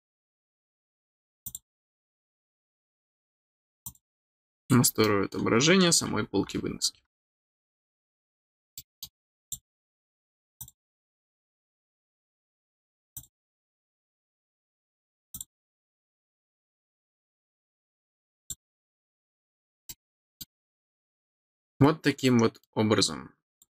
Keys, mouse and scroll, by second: 1.4 click, 3.8 click, 5.0 middle click, 8.5 scroll down 1, 8.7 middle click, 9.4 click, 10.5 click, 13.1 click, 15.3 click, 18.3 click, 19.8 middle click, 20.8 middle click, 21.4 middle click, 22.1 middle click, 23.5 click.